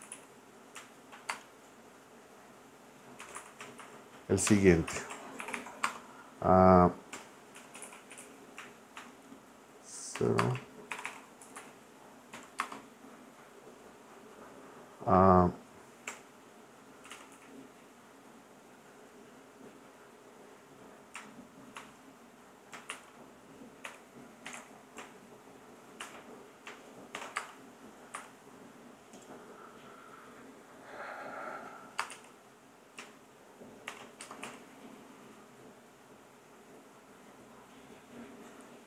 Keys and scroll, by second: 0.0-1.3 typing, 3.0-4.3 typing, 4.5 Return, 5.0 Return, 5.4 shift+4, 5.8 space, 6.9-9.0 typing, 10.2 0, 10.4 space, 10.9 shift+4, 11.4 Left, 12.3 =, 12.6 space, 16.1 \, 17.1 u, 17.3 m, 21.7 shift+-, 22.9-26.0 typing, 27.1 shift+6, 27.4 space, 28.1 n, 32.0 space, 32.1 y, 33.9 shift+6, 34.2 space, 34.4 l.